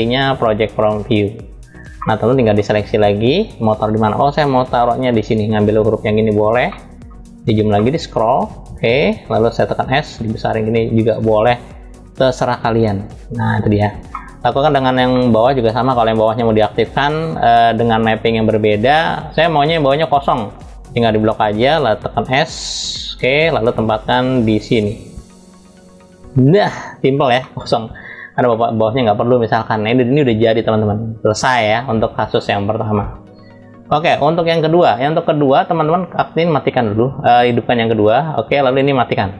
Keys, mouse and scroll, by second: 0.9 click, 1.7 middle click, 2.7 click, 4.4 g, 6.4-6.8 middle drag, 6.9-7.4 scroll up 2, 7.4 middle click, 7.8 scroll up 1, 8.2 scroll down 1, 9.3 s, 13.7 middle click, 14.8 middle click, 15.9 click, 17.9-18.9 scroll down 2, 20.3-21.8 drag, 21.8 s, 26.6 click, 27.1 middle click, 28.2 middle click, 32.6 middle click, 37.5-39.3 drag.